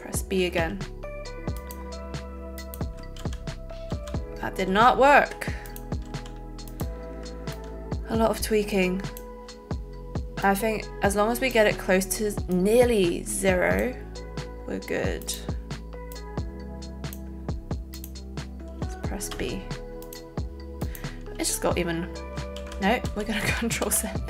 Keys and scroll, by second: 3.2 ctrl+z, 3.8 ctrl+z, 4.6 ctrl+z, 6.0 z, 19.4 b, 22.6 ctrl+z, 23.4 ctrl+z.